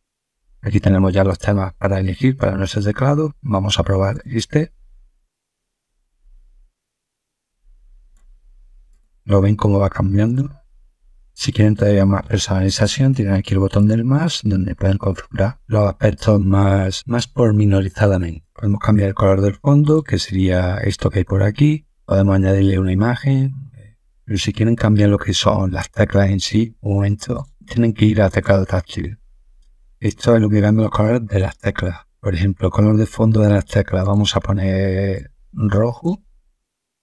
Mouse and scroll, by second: 4.0 click, 6.2 click, 8.0 click, 8.8 click, 10.2 click, 13.7 click, 16.3 middle click, 19.8 click, 27.3 click, 28.2 click, 33.9 click, 35.1 click.